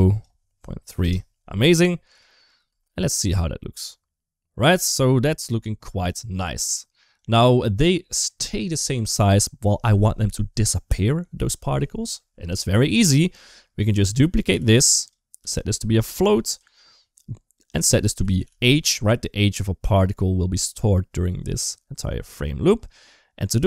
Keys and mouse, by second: 2.0 click, 2.5 space, 5.1 space, 6.0 middle click, 7.0 click, 7.9 click, 12.3 middle click, 13.6 click, 14.4 shift+d, 15.2 g, 16.0 click, 17.6 click, 22.7 middle click.